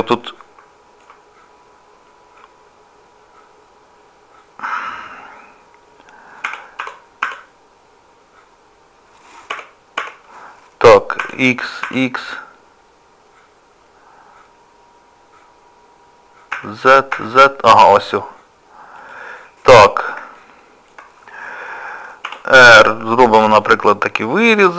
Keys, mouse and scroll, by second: 0.2 middle click, 1.4 scroll up 1, 3.3-5.4 scroll up 4, 19.4 scroll down 2, 20.2 scroll down 2, 20.4 shift+middle click, 22.3 r.